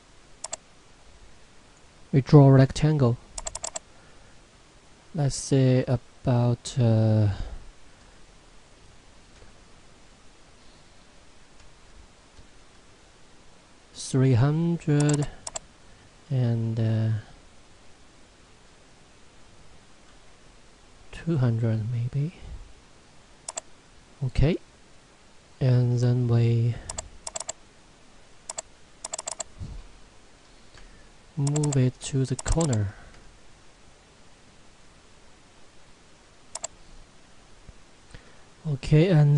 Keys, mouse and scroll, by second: 9.4 BackSpace, 15.0 click, 23.5 right click, 26.9 click.